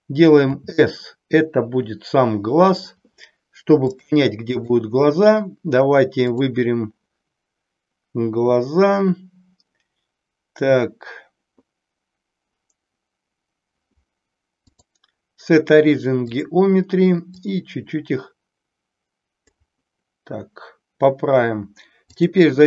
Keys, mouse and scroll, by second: 0.5 s, 3.8-4.8 drag, 14.6-16.5 drag, 17.4-19.5 drag, 22.1-22.6 drag.